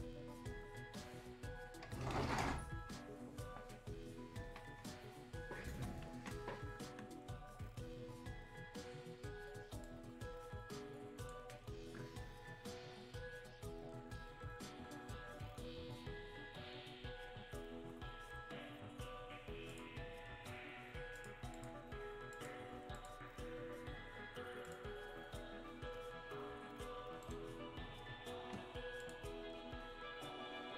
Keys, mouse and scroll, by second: 9.9-12.7 drag, 12.1-12.7 scroll up 1, 12.7-13.9 scroll down 1, 13.9 scroll up 1, 14.8-15.4 scroll down 1, 17.1-17.8 scroll up 1, 17.8-18.1 scroll down 1, 19.7 click, 27.2 right click, 29.0 click.